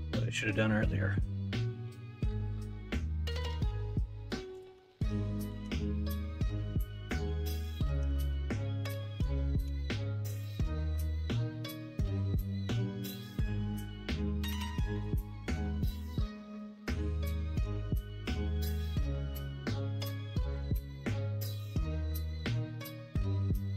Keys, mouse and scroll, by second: 5.5 ctrl+r, 8.1 ctrl+z, 9.6 g, 16.1 ctrl+r, 17.6 3, 19.2 x, 20.7 1, 22.1 ctrl+b.